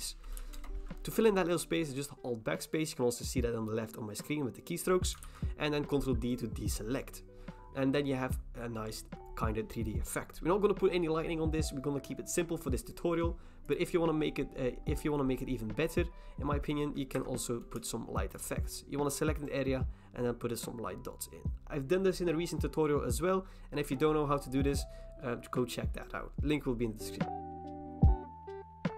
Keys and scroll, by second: 0.6 alt+BackSpace, 5.2 ctrl+d, 17.1 Escape, 27.3 alt+BackSpace, 27.4 ctrl+d, 27.4 ctrl+d, 27.6 ctrl+d, 28.8 ctrl+j, 28.8 v, 28.9 ctrl+t.